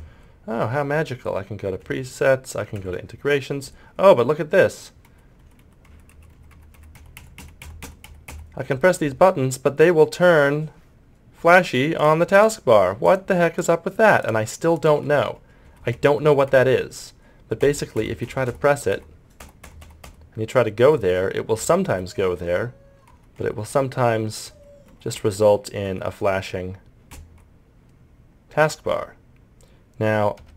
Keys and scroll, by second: 5.1 Delete, 5.4 End, 5.6 Page_Down, 5.9 Home, 6.1 Page_Up, 6.3 Insert, 6.5 Home, 6.8 Page_Up, 7.0 End, 7.2 Delete, 7.4 End, 7.6 Page_Down, 7.8 End, 8.1 Delete, 8.3 Home, 15.3 Delete, 15.7 End, 15.9 Page_Up, 16.2 Home, 16.5 Insert, 18.9 Home, 20.0 Page_Up, 20.9 Insert, 21.9 Delete, 22.4 End, 23.4 Delete, 23.7 Page_Down, 24.5 Delete, 25.9 Page_Down.